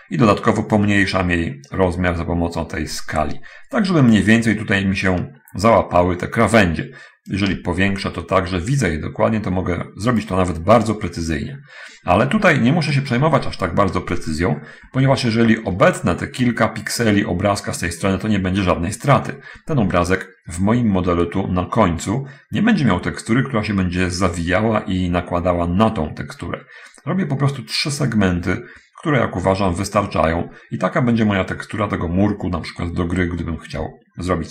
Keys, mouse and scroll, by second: 1.1-4.3 drag, 5.0-5.5 scroll up 1, 5.5 scroll down 1, 5.7 scroll up 1, 5.8-6.6 scroll down 1, 6.6-7.5 scroll down 1, 7.5-8.6 drag, 8.6-10.3 shift+middle drag, 11.0-11.9 shift+scroll down 1, 13.0 shift+middle click, 13.3-14.5 shift+scroll up 1, 14.5-14.8 scroll down 1, 14.8-15.3 scroll up 1, 15.6 shift+middle click, 18.7-19.3 scroll down 1, 19.5-20.4 scroll down 1, 32.7 scroll up 1, 32.9-33.3 scroll down 1, 33.7 shift+middle click.